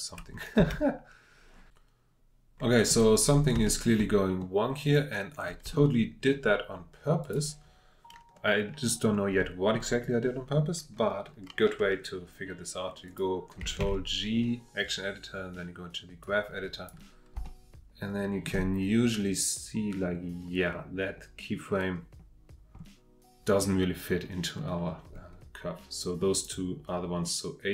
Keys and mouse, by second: 0.6 space, 3.6-5.4 middle drag, 5.8-9.5 shift+drag, 9.5 middle click, 13.8 ctrl+Tab, 16.4 click, 17.5 shift+middle click, 19.6-21.8 drag, 26.3 click.